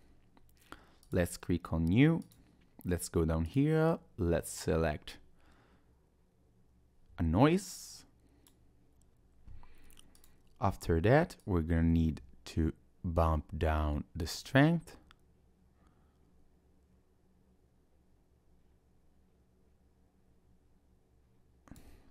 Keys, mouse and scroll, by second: 1.0 click, 2.2 click, 3.5 click, 10.2 click, 11.4 click.